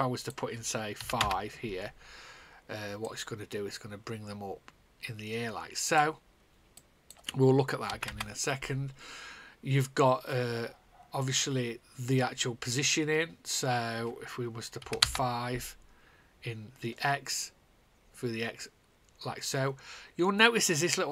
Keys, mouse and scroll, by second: 1.0 5, 1.9 Return, 3.0 click, 3.6 click, 7.8 KP_0, 8.7 Return.